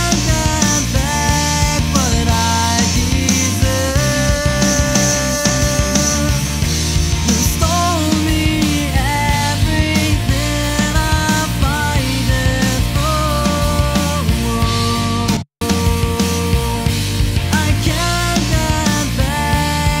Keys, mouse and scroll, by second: 7.8 click, 11.8 click, 17.5 space, 19.1 click.